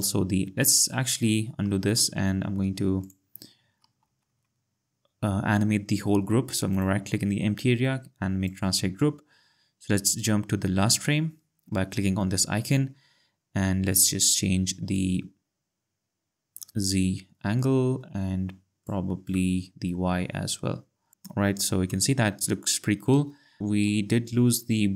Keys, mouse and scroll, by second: 1.8 ctrl+z, 3.0 click, 4.0 z, 6.7 right click, 8.4 click, 14.9 click, 23.6 click.